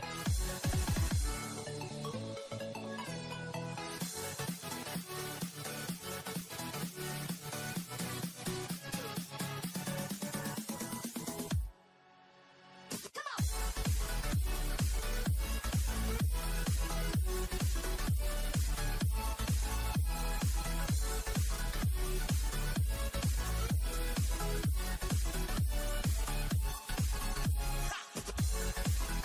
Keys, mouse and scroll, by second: 4.9-5.6 scroll down 2, 5.6-7.0 shift+middle drag, 7.0-13.0 drag, 13.9-16.2 drag, 16.4-22.7 drag, 23.3-25.2 drag, 25.2-25.9 scroll down 2, 25.9-28.4 shift+middle drag, 28.4-28.8 scroll up 1, 28.8-29.2 shift+middle drag.